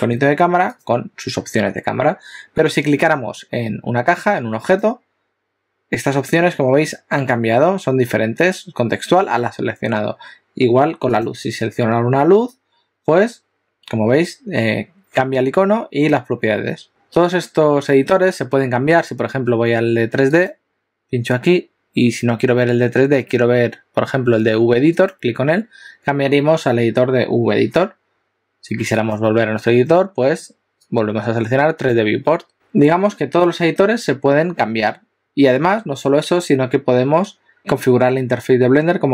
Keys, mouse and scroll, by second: 0.9 click, 4.8 click, 11.2 click, 20.5 click, 29.0 click.